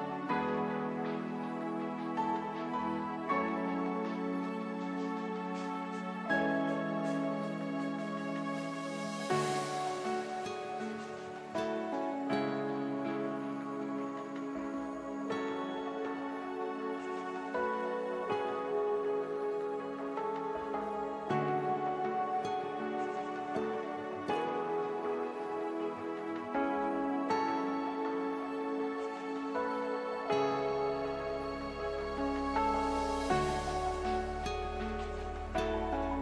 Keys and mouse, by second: 2.8 s, 3.9 s, 8.9 s, 12.0 s, 14.9 Escape, 16.1 z, 18.9 KP_7, 19.8 shift+a, 22.1 z, 29.9 z, 32.1-36.1 drag, 33.2 shift+a.